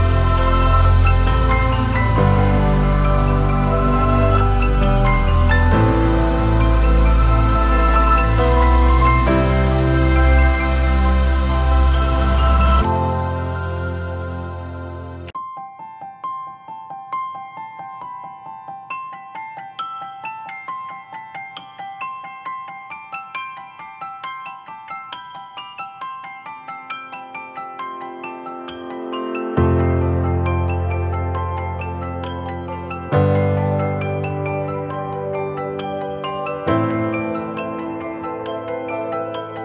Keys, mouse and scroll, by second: 10.1 alt+click, 11.3 ctrl+t, 14.6 alt+shift+click, 18.8 Return, 28.8 ctrl+-, 28.9 ctrl+-, 29.7 ctrl+-, 31.8 ctrl+t, 32.7 alt+shift+click, 35.7 Return.